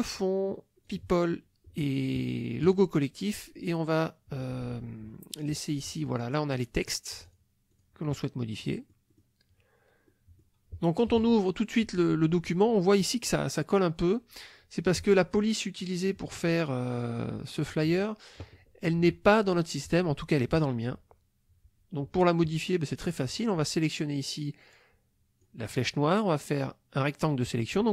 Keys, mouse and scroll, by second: 0.9 click, 2.6 click, 5.4 click, 7.2 click, 7.7 click, 8.6 middle click, 10.1 middle click, 11.1 KP_Subtract, 14.0 click, 15.8 click, 17.5 click, 25.4 click.